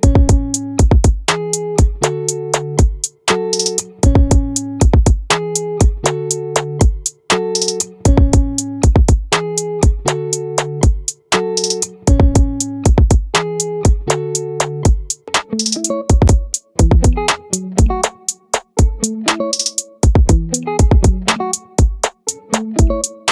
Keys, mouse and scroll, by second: 5.4 middle click, 12.4 Tab, 14.4 z, 16.0 ctrl+a, 18.2 ctrl+a, 19.8 shift+a.